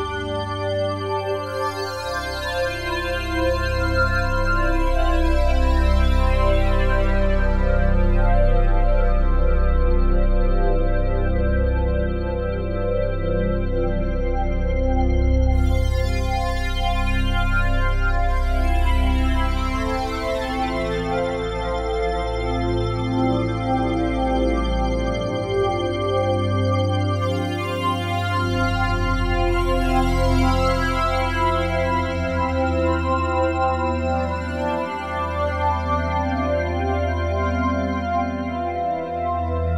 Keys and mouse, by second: 2.5 s, 2.8 y, 3.0 y, 4.6 Escape, 5.4-6.4 drag, 6.2-6.8 typing, 7.8-8.5 typing, 8.7-12.2 ctrl+alt+drag, 12.8 click, 14.1 click, 15.1 click, 15.3 click, 16.6 click, 17.6 click, 20.8 click, 21.3 click, 22.2 a, 25.0 click, 26.7 click, 27.3 click, 28.2 click, 30.2 ctrl+alt+s, 31.6 click, 33.2 ctrl+alt+click, 34.1 ctrl+alt+click, 34.6 ctrl+alt+click, 35.2-36.6 alt+drag, 36.9 click, 38.1 click, 38.5 click.